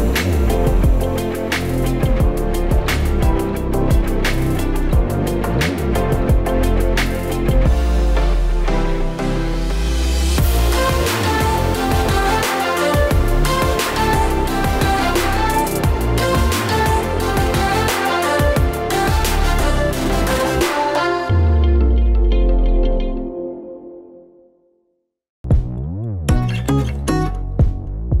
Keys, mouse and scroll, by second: 1.5-2.2 scroll down 1, 2.3-2.8 scroll down 3, 2.8 click, 2.8-3.5 scroll down 2, 3.5 click, 4.4-5.6 scroll up 5, 4.8 middle click, 5.6 click, 6.1 middle click, 6.9 click, 7.4 middle click, 8.1 scroll down 2, 9.1 click, 12.3 middle click, 13.3 click, 13.6 middle click, 14.3 click, 14.9-15.7 scroll down 1, 15.7 click, 15.7-16.4 scroll down 2, 16.5 click, 17.6 ctrl+z, 17.8 click, 18.4 ctrl+z, 18.7 click, 20.6 click, 22.0 click, 24.4 middle click, 25.0-25.4 scroll up 2, 25.3 shift+middle click, 26.5 click, 27.0 click.